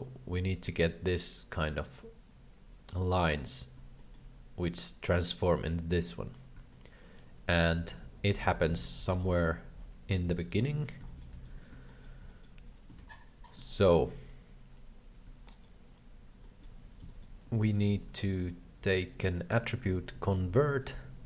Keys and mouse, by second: 0.4 click, 1.1 click, 1.8 click, 2.5 click, 3.1 click, 4.0 shift+middle click, 6.8-8.4 shift+middle drag, 8.8 alt+a, 9.3 middle click, 10.1 b, 11.1 shift+middle click, 11.3 b, 11.9 shift+middle click, 12.2 g, 12.9 alt+a, 13.7 shift+middle click, 15.5 shift+middle click, 16.4 shift+middle click, 16.9 right click, 17.3 g, 17.6 shift+middle click, 17.8 shift+a.